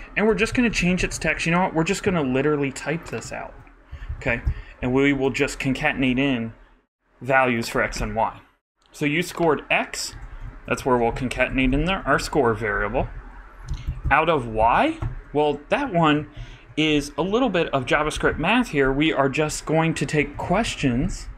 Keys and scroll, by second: 0.3 super+., 0.6-1.7 typing, 3.9 shift+super+Right, 4.2 shift+Left, 5.1 shift+super+Left, 5.2 shift+super+c, 6.2 super+c, 8.0 super+v, 10.4-12.8 typing, 13.0 shift+Delete, 13.6 alt+Delete, 14.5 alt+shift+Right, 15.0 alt+shift+BackSpace, 15.8 shift+BackSpace, 16.3 shift+=, 16.8 shift+=, 17.2 shift+', 17.8 shift+Delete.